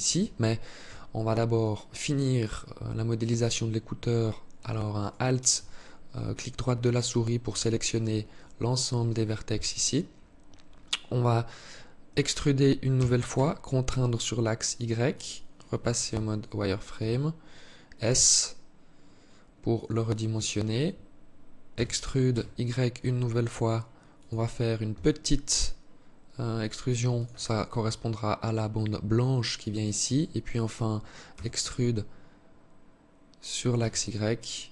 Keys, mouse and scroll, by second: 0.9 alt+right click, 4.3 alt+right click, 6.9 alt+click, 8.8 KP_3, 12.2 e, 15.4 z, 16.3 s, 21.0 e, 24.2 s, 30.6 e.